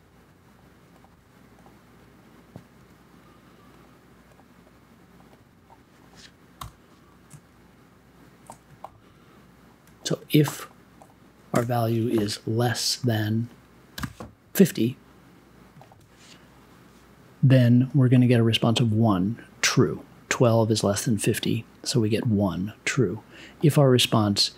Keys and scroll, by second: 2.7 m, 6.5 i, 11.5 space, 13.7-14.5 typing.